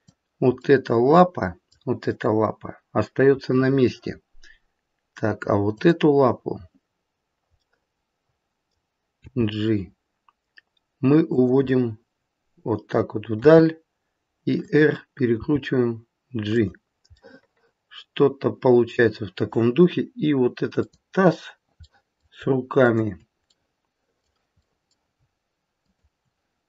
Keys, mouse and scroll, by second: 0.6 middle click, 1.0 middle click, 3.5 middle click, 5.7 click, 7.5 middle click, 9.2 g, 11.7 middle click, 12.1 middle click, 13.3 r, 15.5 g, 17.2 middle click, 20.7 click, 21.7 middle click, 22.8 shift+click, 23.6 middle click, 24.6 middle click, 25.8 shift+click.